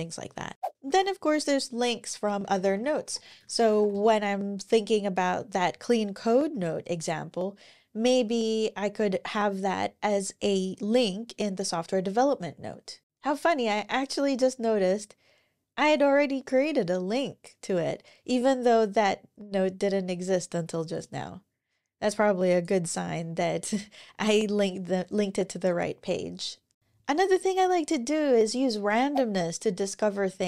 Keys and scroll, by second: 0.6 super+o, 1.9-4.0 typing.